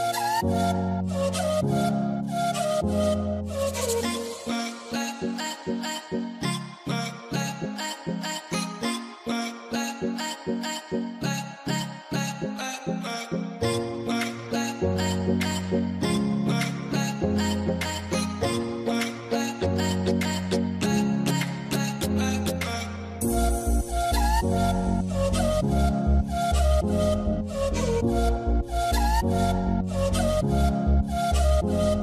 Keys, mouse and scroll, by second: 3.3 alt+middle click, 9.1 alt+middle click, 12.9 middle click, 13.4 z, 13.5 z, 13.9 scroll down 1, 14.3 l, 14.9 z, 15.4 middle click, 16.7 scroll up 1, 17.2 ctrl+click, 17.6 ctrl+scroll down 1, 19.3 alt+middle click, 20.1 ctrl+click, 20.8 ctrl+scroll down 2, 20.9 alt+middle click, 22.4 alt+middle click, 23.6 ctrl+click, 23.8 middle click, 25.6 alt+middle click, 27.0 double click, 30.0 double click, 30.4 alt+middle click.